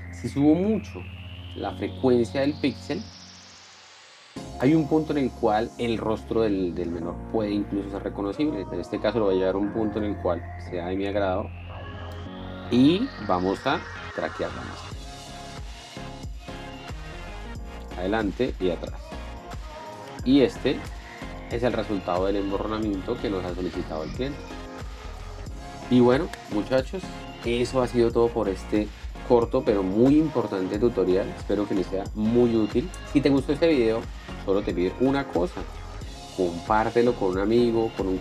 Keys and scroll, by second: 20.7 p, 21.0 space.